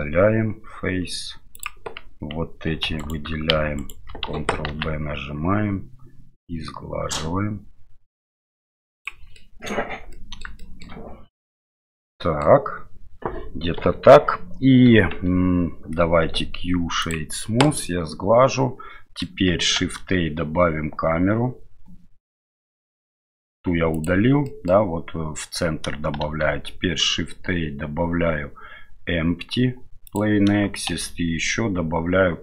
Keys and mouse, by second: 2.7 2, 3.8 alt+right click, 4.7 ctrl+b, 9.3 middle click, 10.2 middle click, 10.6 shift+middle click, 11.5-12.5 middle drag, 13.8 KP_7, 15.3 Tab, 16.2 q, 17.7-19.2 middle drag, 19.8 shift+a, 24.5 middle click, 26.2 shift+a, 30.9 shift+a.